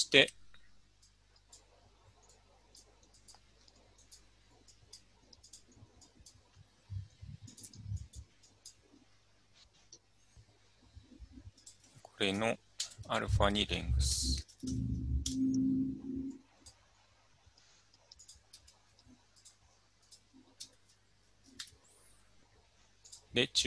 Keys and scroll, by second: 12.8-15.2 typing, 15.3 Return, 18.6 Tab, 20.6 Tab, 21.5 typing.